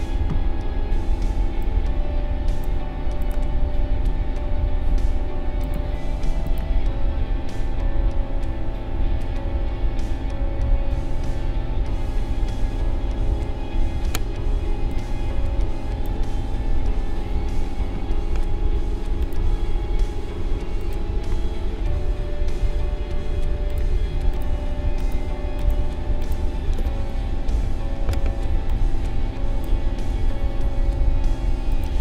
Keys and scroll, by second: 14.6 space, 27.6 ctrl+g.